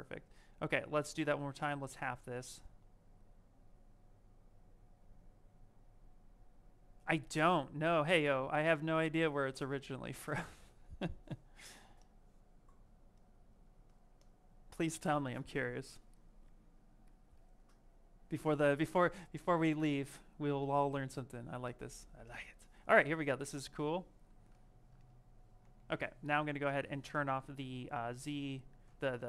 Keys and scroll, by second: 25.5 ctrl+z, 28.7 ctrl+z.